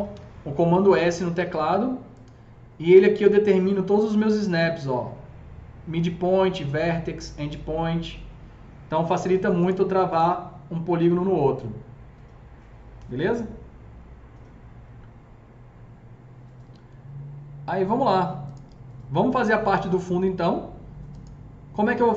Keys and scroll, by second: 0.0 s.